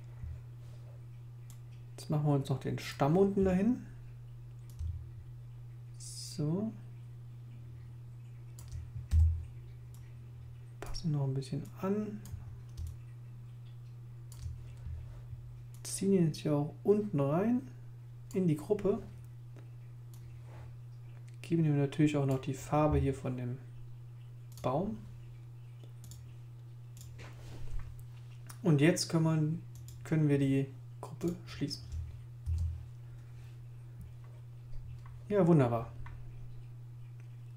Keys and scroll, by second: 9.1 super+v, 32.4 super+i.